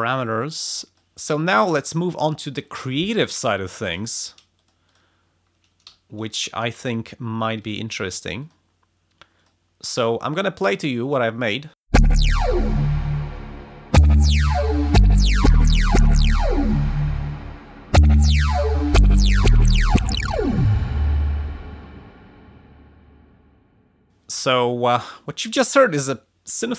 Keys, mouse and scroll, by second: 0.9 click, 3.9 click, 4.5 click, 5.8 f, 7.6 click, 8.4 click, 9.4 click, 10.4 click, 11.9 space, 22.6 space, 24.9 click, 26.6 click.